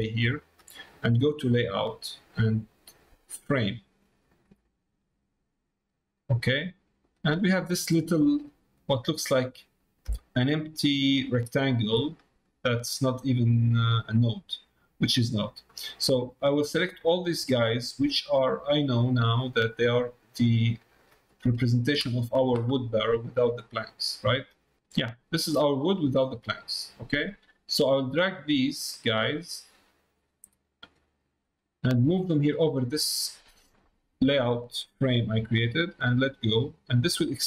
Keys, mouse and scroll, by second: 8.4 middle click, 9.3 middle click, 10.2 middle click, 12.1 middle click, 13.0 middle click, 13.9 middle click, 15.1 middle click, 16.7-19.0 drag, 25.7 middle click, 27.8-28.8 drag, 29.1-30.9 drag, 32.0-36.3 drag, 37.0-37.4 drag.